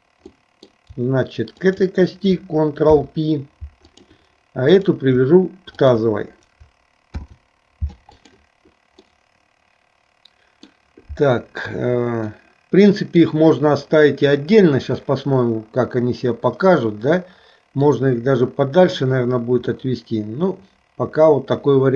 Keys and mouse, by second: 0.4 middle click, 1.6 shift+click, 2.9 ctrl+p, 4.8 click, 5.9 shift+click, 7.1 ctrl+p, 9.1-10.9 middle drag, 12.4 middle click, 15.1-18.0 middle drag, 19.8-21.9 middle drag.